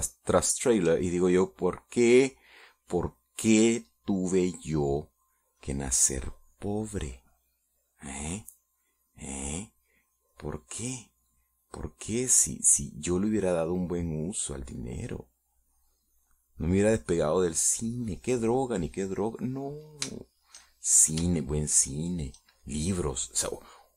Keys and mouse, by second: 0.9 shift+middle click, 2.4 shift+middle click, 6.9-11.4 drag, 11.7 click, 12.3-13.3 middle drag, 14.1-20.4 drag, 20.7 middle click, 21.5 shift+middle click, 22.0 shift+middle click, 22.6 shift+middle click, 23.3 shift+middle click.